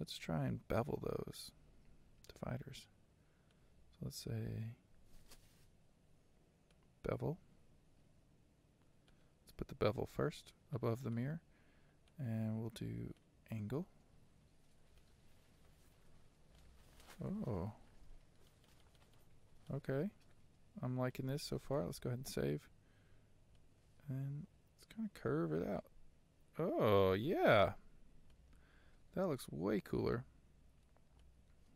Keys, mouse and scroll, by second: 2.4 click, 9.4-15.0 drag, 15.0 shift+middle click, 15.8-16.7 scroll up 5, 16.7-18.7 middle drag, 18.7-28.4 drag, 28.4-31.7 shift+middle drag.